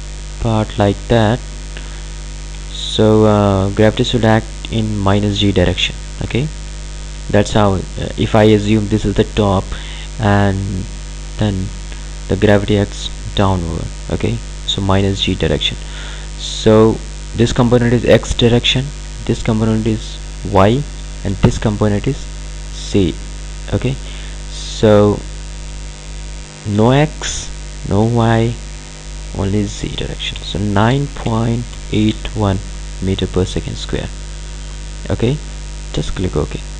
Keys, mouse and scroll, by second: 17.3 click, 24.8 click, 27.7 click, 36.0 click.